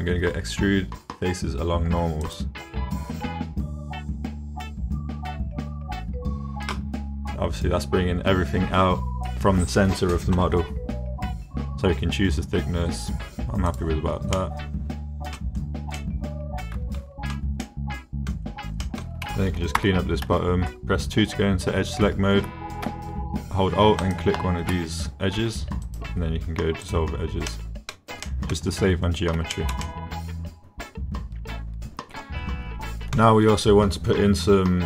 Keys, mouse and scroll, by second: 13.7 click, 14.4-15.4 drag, 16.0 click, 16.2 middle click, 16.7 click, 17.6 click, 18.8 shift+click, 19.8 2, 25.9 click, 27.5 middle click, 28.3 click, 29.5 shift+middle click, 29.9-33.1 middle drag.